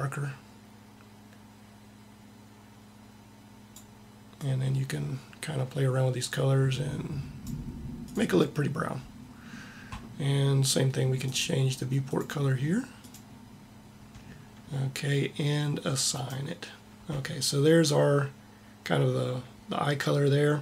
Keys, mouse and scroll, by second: 11.1 click, 16.0 click.